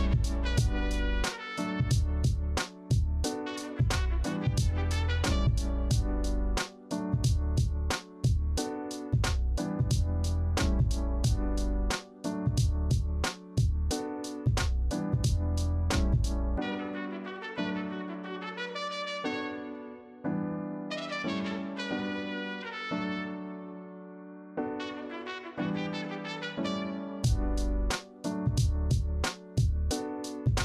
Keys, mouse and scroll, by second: 10.4 ctrl+z, 19.0 ctrl+c, 19.0 ctrl+f, 25.8 ctrl+alt+z.